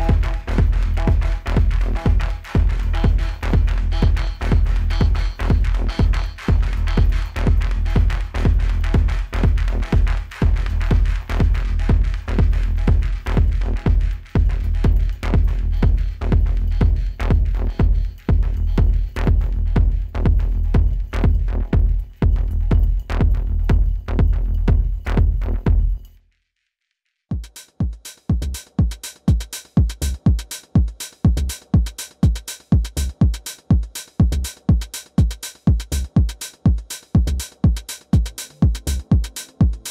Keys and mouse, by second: 1.0 alt+click, 5.6-9.1 drag, 9.5 F4, 10.6-11.8 drag, 12.8 alt+click, 15.6-16.5 alt+middle drag, 20.5 click, 25.4 click, 26.6-27.7 drag, 39.8 click.